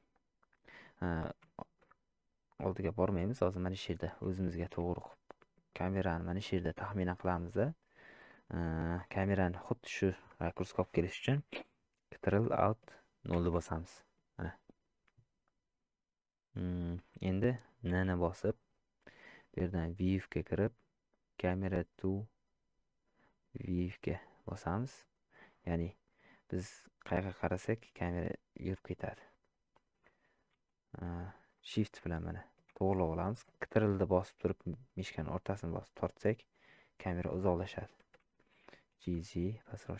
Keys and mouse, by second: 1.7 shift+middle click, 2.6-3.7 middle drag, 4.4 shift+middle click, 4.9-5.4 middle drag, 5.8 shift+middle click, 23.2 click, 24.9 click, 26.9-29.2 middle drag, 32.0-32.6 shift+middle drag, 35.4-37.7 ctrl+middle drag.